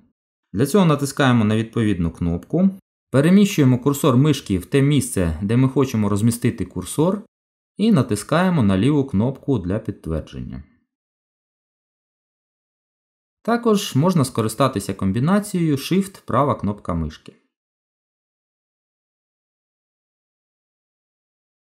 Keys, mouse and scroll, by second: 1.5 click, 3.9 click, 5.2 click, 6.9 click, 7.3 click, 8.5 click, 9.9 click, 13.4 click, 16.4 shift+right click, 17.2 shift+right click, 18.4 shift+right click, 20.3 shift+right click.